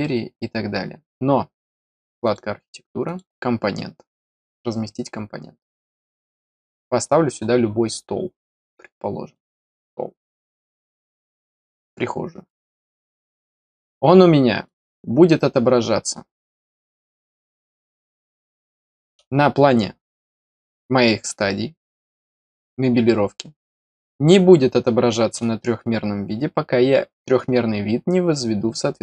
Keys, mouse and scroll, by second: 2.2 click, 3.0 click, 4.2 click, 5.9 click, 9.3 click, 10.6 click, 12.4 right click, 13.1 click, 14.6 click, 16.3 middle click, 17.2 right click, 18.0 click, 18.5 middle click.